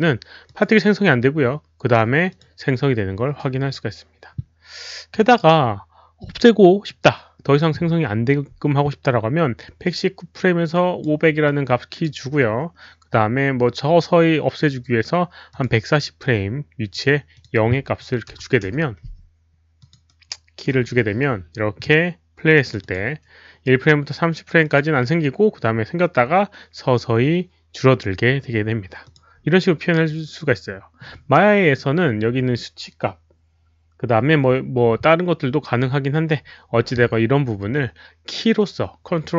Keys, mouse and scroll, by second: 0.4 Return, 0.4 click, 0.4 KP_0, 0.4 KP_5, 2.0 Return, 2.0 right click, 2.0 KP_0, 2.0 KP_5, 2.3 click, 4.0 Return, 4.0 click, 4.0 right click, 4.0 KP_0, 5.1 click, 5.1 right click, 5.3 click, 5.3 right click, 6.2 click, 8.7 click, 9.0 click, 10.7 right click, 11.4 click, 13.2 click, 13.2 right click, 15.5 click, 16.0 right click, 16.9 click, 17.3 click, 18.3 click, 18.3 right click, 18.3 KP_0, 18.7 Return, 18.7 click, 18.7 right click, 18.7 KP_0, 19.8 click, 20.0-20.6 right drag, 22.6 click, 22.8 click, 22.9 Return, 22.9 right click, 22.9 KP_0, 24.6 click, 24.7 Return, 24.7 right click, 24.7 KP_0, 27.4 Return, 27.4 click, 27.4 right click, 27.4 KP_0, 29.0 click, 30.6 right click.